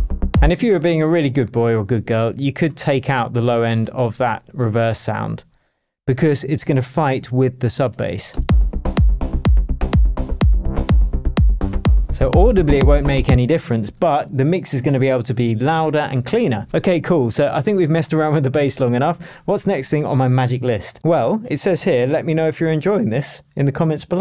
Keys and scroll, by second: 0.4 space, 8.3 space, 13.3 space, 18.6 super+s.